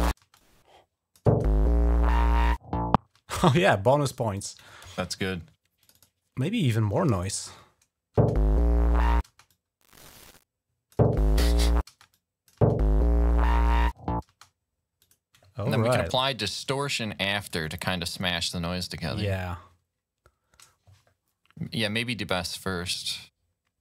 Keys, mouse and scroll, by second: 0.1 click, 2.9 space, 4.1 click, 5.6 click, 5.9 click, 8.0 space, 9.0 space, 9.3-10.7 drag, 10.1-12.4 typing, 11.9 click, 14.8 click, 15.5 right click, 16.0 right click, 17.2 click.